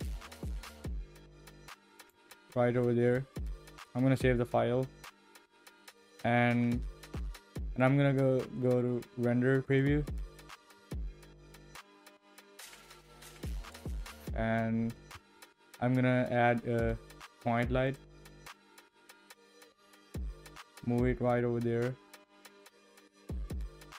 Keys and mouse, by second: 3.4 h, 3.4 d, 15.1 shift+a, 20.6 g.